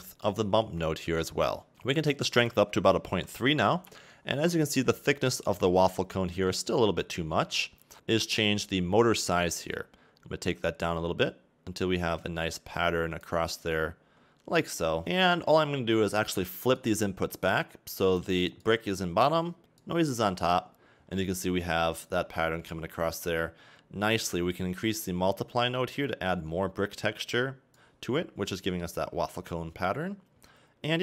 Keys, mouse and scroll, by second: 0.7 click, 1.7 scroll up 4, 1.8 click, 3.8 click, 10.6 shift+click, 15.0 click, 18.2 click, 18.6 click, 19.8 click, 21.2 middle click, 22.4 middle click, 24.9 click, 28.5 middle click.